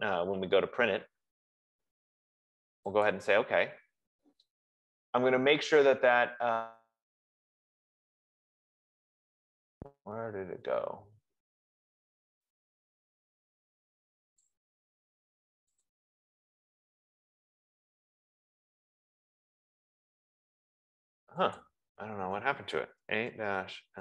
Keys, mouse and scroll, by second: 11.6-12.1 scroll, 14.1-14.5 scroll, 14.6 click, 14.8 F15, 16.4 click, 22.0 click, 23.0-24.0 typing.